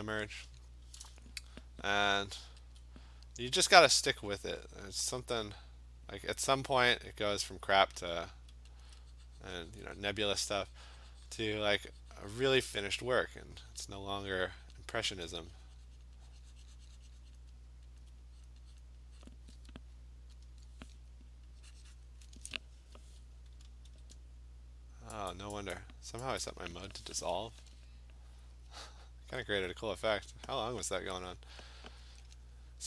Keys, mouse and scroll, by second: 2.8 alt+click, 5.0 click, 6.0 click, 6.2 click, 6.8 click, 7.5 click, 7.7 alt+click, 8.1 alt+click, 8.3 alt+click, 8.8 click, 10.0 alt+click, 10.5 click, 11.4 click, 13.8 click, 14.7 click, 16.1 click, 16.4 click, 17.4 click, 18.0 alt+click, 18.2 alt+click, 18.5 click, 18.8 click, 19.3 click, 19.8 alt+click, 20.5 click, 22.1 click, 23.9 ctrl+z, 25.3 click, 25.8 click, 26.4 click, 29.5 alt+click, 31.4 alt+click, 31.6 click.